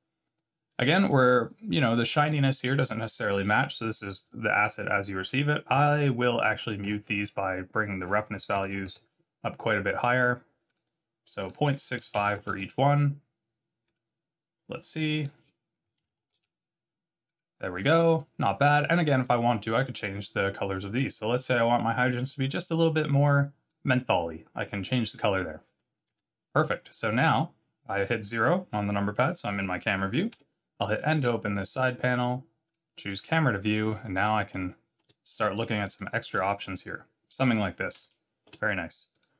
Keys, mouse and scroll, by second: 0.8 middle click, 5.0 click, 7.8 click, 10.6 click, 11.4 click, 13.8 click, 15.1 click, 17.3 click, 19.2 click, 20.8 click, 21.4 click, 25.1 click, 26.0 KP_0, 30.3 n, 31.4 click, 32.6 click, 33.3 scroll down 2, 33.8 middle click, 34.5 shift+middle click, 35.3 middle click, 36.0 shift+middle click, 36.5 middle click, 38.0 shift+middle click, 39.1 click.